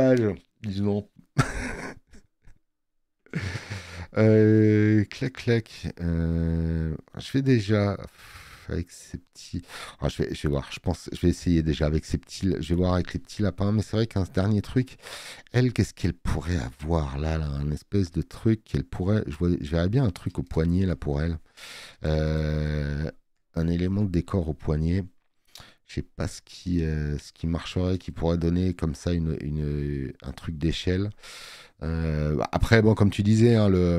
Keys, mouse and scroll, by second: 3.4 space, 3.6 click, 10.0 space, 10.2 click, 12.2 click, 14.8 click, 14.8 space, 18.1 middle click, 31.4 space, 31.6 click.